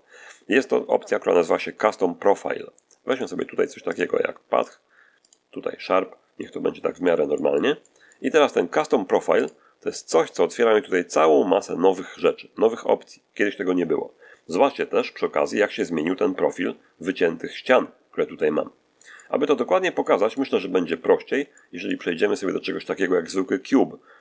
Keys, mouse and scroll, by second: 3.0 click, 3.8 click, 4.5 click, 5.2 click, 6.0 scroll down 1, 6.3 middle click, 7.2 middle click, 9.3 click, 10.4-11.0 scroll down 1, 11.1-11.5 scroll down 1, 14.8-20.4 middle drag, 20.4-21.0 scroll up 1, 21.4 shift+middle click, 22.3 shift+scroll down 2.